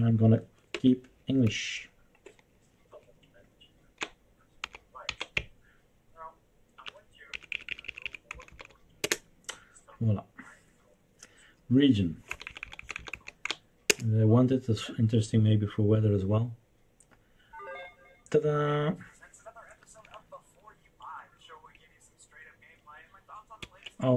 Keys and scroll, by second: 0.7 Return, 1.4 Down, 1.9 Down, 2.0-3.9 Down, 4.7 Down, 5.0 Down, 5.3-6.8 Up, 7.3 Up, 7.5 Up, 7.7 Up, 7.9 Up, 8.1 Up, 8.3 Down, 8.5 Down, 9.0 Return, 12.3 Down, 12.4 Down, 12.6 Down, 12.8 Down, 12.9 Down, 13.1 Down, 13.4 Down, 13.8 Return, 23.8 Escape.